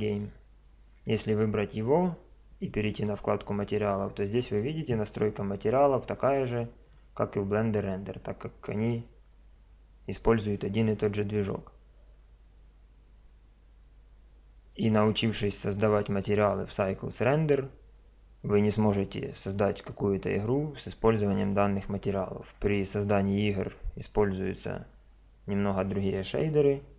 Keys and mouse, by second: 2.7 click, 6.8 click.